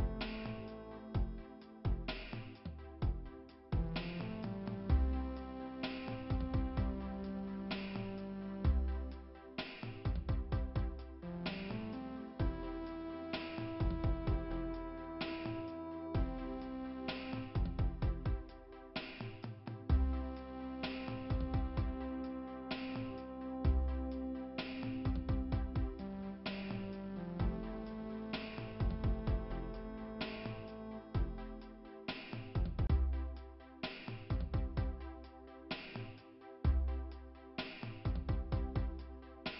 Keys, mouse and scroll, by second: 1.2 scroll up 1, 1.2-1.7 scroll down 2, 8.5 click, 9.5 click, 11.5 click, 13.8 click, 15.2 click, 16.4 click, 18.0 click, 18.5 click, 19.7 click, 20.8 click, 22.7 0, 23.6 Return, 27.1 click, 28.6 click, 29.8 click, 30.0 click, 32.2 click, 33.0-35.7 typing, 38.2 click.